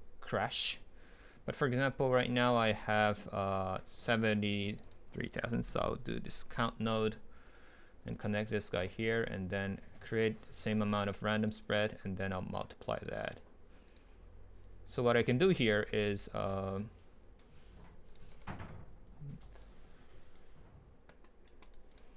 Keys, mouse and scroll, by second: 6.2 Return, 7.5-15.5 drag, 15.8-16.4 drag, 16.4-17.4 right drag, 17.6 ctrl+z, 18.1 drag, 18.4-18.8 middle drag, 18.9 ctrl+z, 20.3 right click, 21.3 middle click, 21.7-22.1 drag.